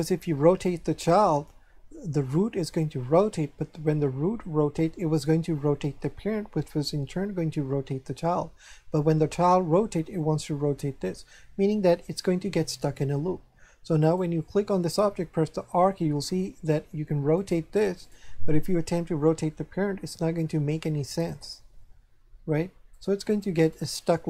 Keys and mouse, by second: 14.0 right click, 15.5 r, 17.4 right click, 19.6 r, 20.7 right click, 21.8 r, 22.9 right click.